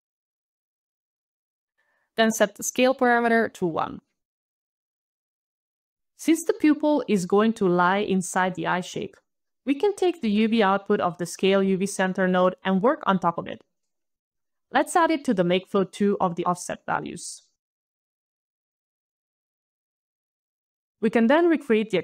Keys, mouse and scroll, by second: 0.0 alt+click, 0.7 ctrl+alt+d, 0.7 alt+click, 1.0 alt+click, 1.4 alt+click, 2.1 alt+click, 2.3 alt+click, 2.5 alt+1, 3.5 alt+click, 3.6 alt+click, 4.7 alt+1, 4.7 alt+click, 5.8 alt+right click, 6.4 alt+middle click, 6.6 alt+middle click, 7.3 alt+right click, 7.9 alt+scroll, 8.3 alt+right click, 11.6 alt+click, 12.8 alt+click, 16.8 alt+click, 17.2 alt+a, 17.4 alt+d, 17.6 alt+d, 18.2 alt+click, 18.6 alt+click, 19.3 alt+click, 20.0 alt+click.